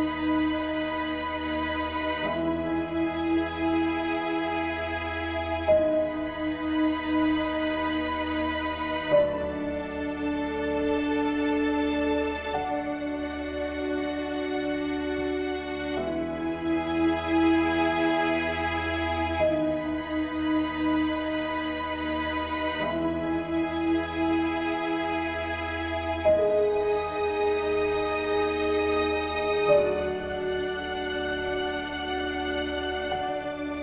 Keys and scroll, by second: 0.5 ctrl+alt+shift+e.